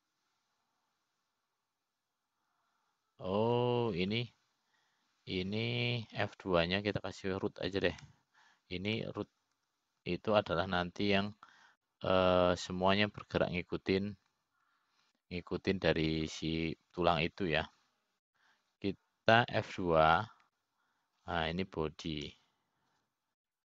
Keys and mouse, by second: 2.1-6.1 middle drag, 6.6 click, 9.3 F2, 15.5 click, 18.8-21.3 drag, 23.1 F2.